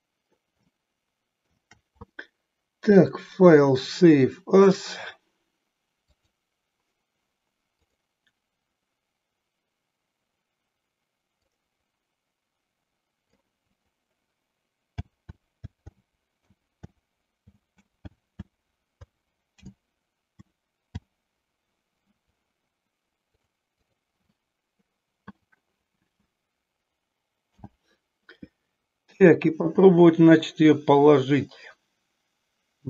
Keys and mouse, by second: 0.8 shift+middle click, 3.0-6.6 drag, 27.4 n.